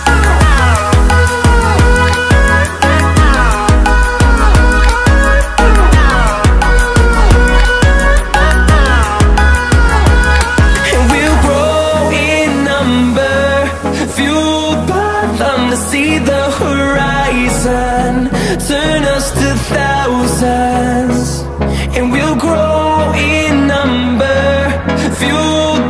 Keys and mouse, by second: 0.0 Tab, 0.7 shift+click, 2.3 shift+click, 3.3 e, 4.3 z, 8.6 ctrl+click, 9.2 shift+click, 12.4 r, 13.3 click, 15.0-16.5 drag, 16.9 middle click, 19.1 click, 20.8 click, 22.2 r.